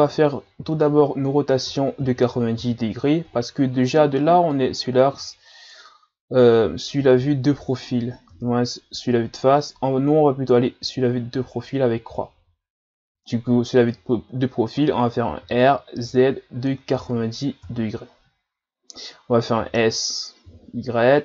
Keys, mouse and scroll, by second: 0.6 r, 4.5 click, 7.1 KP_3, 11.4 KP_3, 12.2 KP_3, 14.2-15.4 scroll down 2, 15.4 r.